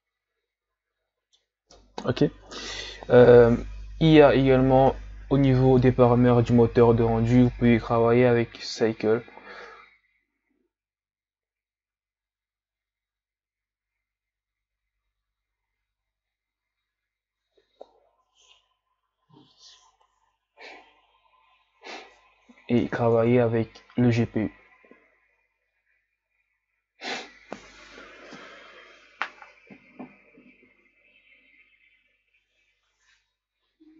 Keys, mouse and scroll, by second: 20.2 click, 23.1-27.3 drag.